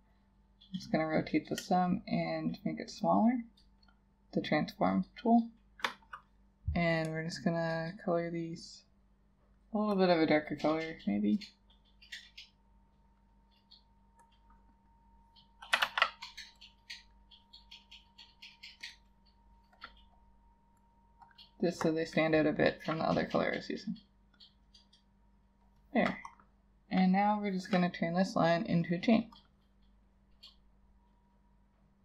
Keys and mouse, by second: 1.9 shift+click, 15.9 ctrl+a.